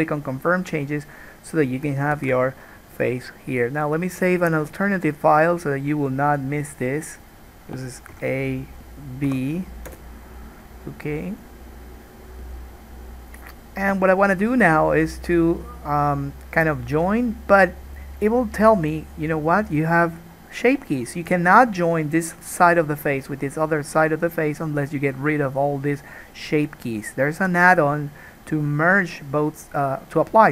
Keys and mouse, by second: 2.5 ctrl+s, 19.9-27.6 middle drag, 27.6 click, 27.8-30.5 middle drag.